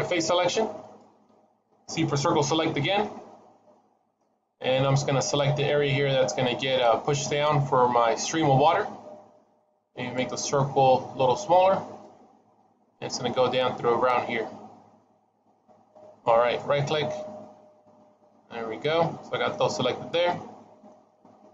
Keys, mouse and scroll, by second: 0.7 click, 2.7 c, 16.8 middle click, 19.7 scroll down 1, 20.1 middle click, 21.0 scroll up 3.